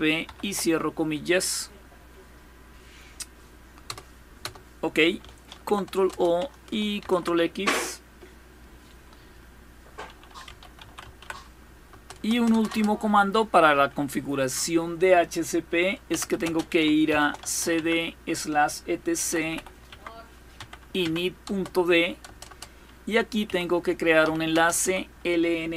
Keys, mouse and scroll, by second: 0.0-0.7 typing, 3.5 Return, 4.1 Return, 5.2 ctrl+o, 5.7 Return, 6.7 ctrl+x, 8.9 click, 9.8-11.4 typing, 11.6 Return, 11.9 Return, 12.0 Return, 12.2 Return, 12.4 Return, 12.6 typing, 15.5-24.4 typing, 25.6-25.7 typing.